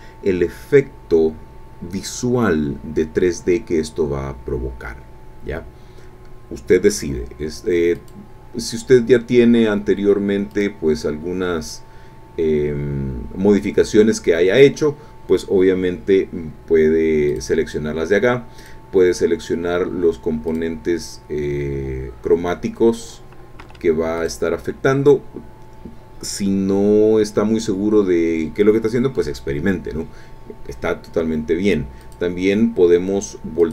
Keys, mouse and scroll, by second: 8.0 click, 10.5 click, 17.3 click, 18.6 click, 20.5 click, 23.6 Escape, 24.2 click, 24.6 Escape, 32.0 click, 33.6 click.